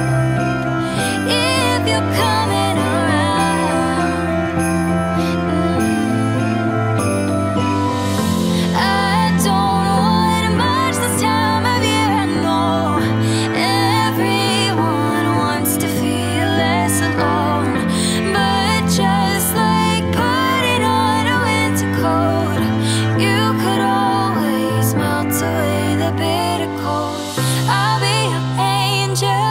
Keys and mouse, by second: 1.3 middle click, 2.4 KP_0, 4.1 click, 4.6 KP_0, 7.0 g, 7.1 z, 9.9 click, 13.0 shift+a, 16.9 g, 17.0 z, 18.0 g, 18.2 y, 19.0 click, 19.5 g, 19.7 x, 20.7 click, 21.4 click, 22.0 KP_0, 24.0 g, 24.2 z, 26.2 g, 26.4 x, 27.6 click, 27.9 g, 28.1 z.